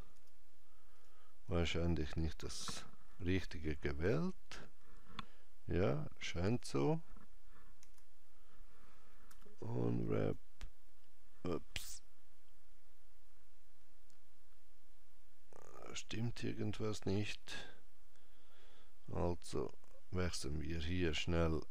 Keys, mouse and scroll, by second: 0.2 Tab, 1.0 click, 6.6 Tab, 7.9 a, 9.4 u, 21.1 click.